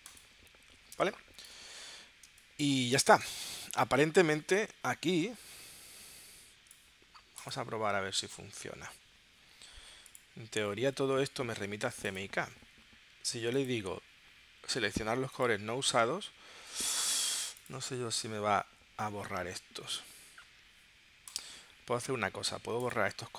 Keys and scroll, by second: 0.9 space, 2.3 space, 18.6 super+s.